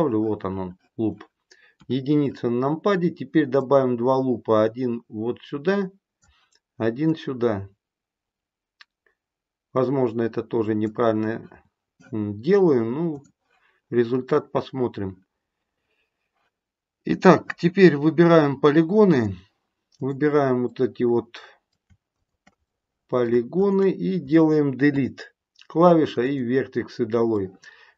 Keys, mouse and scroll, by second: 1.7 KP_1, 3.6 click, 7.0 click, 13.1 click, 19.0 click, 19.9 click, 20.6 middle click, 22.0 shift+click, 22.6 middle click, 22.8 middle click, 23.5 shift+click, 24.8 Delete, 27.3 middle click.